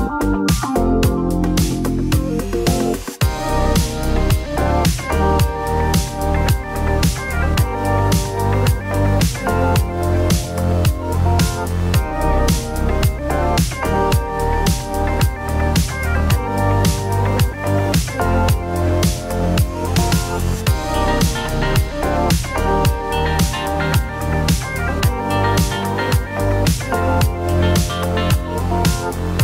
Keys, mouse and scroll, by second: 0.2 ctrl+KP_Add, 0.7 ctrl+KP_Add, 4.0 g, 4.3 z, 7.8 click, 8.1 middle click, 9.0 click, 9.5 shift+click, 10.8 click, 11.1 middle click, 12.1-13.3 typing, 13.3 click, 13.7 click, 16.0 g, 16.1 y, 17.5 click, 19.2 g, 19.5 y, 23.6 click, 23.6 typing, 23.8 middle click, 24.5 Tab, 24.7-25.1 middle drag, 25.1 right click, 25.4 middle click, 26.0 shift+middle click, 26.5 Tab, 27.5 g, 27.8 x, 29.3 click.